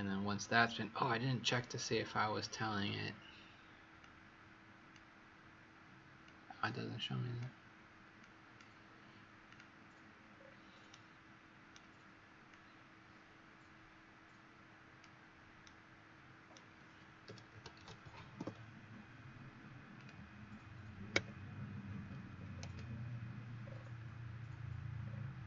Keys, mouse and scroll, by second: 4.0 click, 10.3-10.8 scroll up 1, 10.8 right click, 10.8 scroll up 3, 12.4 click, 15.5 right click, 17.2-18.5 typing, 19.9 click, 21.1 KP_Subtract, 22.0 KP_2, 22.1 KP_6, 22.3 KP_0, 23.6-24.7 scroll down 6, 24.9-25.4 scroll up 3.